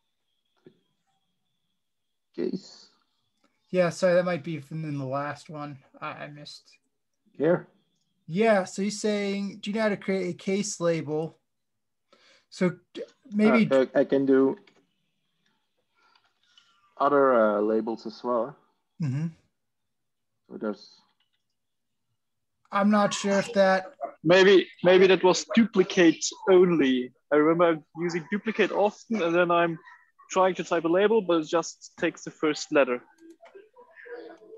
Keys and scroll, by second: 9.8 Tab, 12.8 shift+Return, 14.6 typing, 15.8-16.9 typing, 18.9 Return, 20.8 Tab, 21.1 Tab.